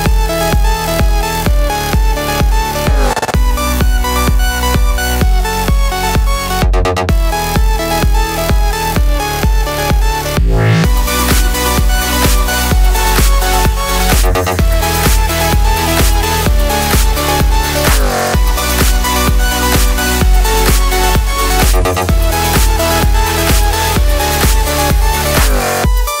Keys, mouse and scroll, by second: 0.0 e, 0.5 click, 0.6 z, 1.0-2.2 middle drag, 2.1 3, 2.2 alt+click, 2.5-3.6 middle drag, 2.7 alt+e, 3.6 click, 3.7 ctrl+z, 5.1 alt+click, 6.9 click, 7.1 a, 9.1 click, 9.8 ctrl+z, 11.3 click, 11.4 x, 11.8 click, 12.2 x, 13.1 click, 13.3 a, 13.5 ctrl+z, 14.4 e, 14.8 3, 15.0 alt+click, 15.4 alt+e, 18.3 click, 18.6 KP_1, 18.8 z, 19.5 click, 19.9 x, 20.4 middle click, 20.7 3, 20.7 click, 20.9 click, 21.1 x, 21.8-22.3 scroll down 2, 22.3 z, 23.1 middle click, 23.4 3, 23.6 click, 23.9 a, 24.1-26.2 middle drag, 26.1 2.